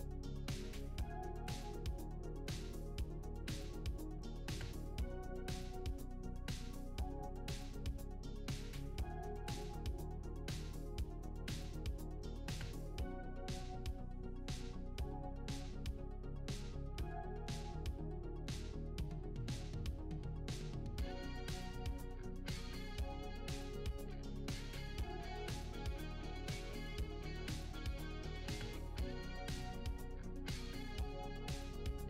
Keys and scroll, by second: 0.7-2.3 typing, 1.0 Return, 5.4 1, 5.5 Return, 9.3 shift+w, 15.2 w, 15.4 s, 15.7 w, 16.1 e, 17.2 Return, 17.8 shift+d, 17.8 shift+w, 18.1 shift+a, 19.6-22.8 typing, 23.7 Delete, 24.5-29.9 typing, 31.6-32.0 typing.